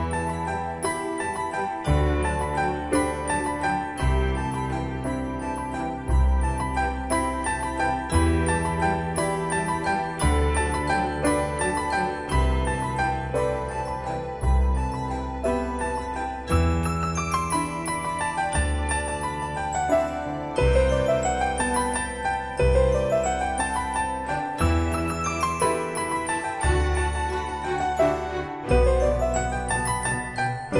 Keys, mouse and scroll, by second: 1.1 typing, 3.6-5.2 typing, 5.8 Return, 7.0 middle click, 9.6-10.2 typing, 11.9-13.6 scroll up 1, 13.7 scroll down 1, 16.0-17.1 typing, 17.8-18.2 scroll up 1, 18.8 click, 19.2-19.6 scroll up 1, 22.7 click, 24.5-24.9 scroll down 1, 25.8-27.1 middle drag, 28.0 scroll up 1, 28.9-29.6 scroll down 1.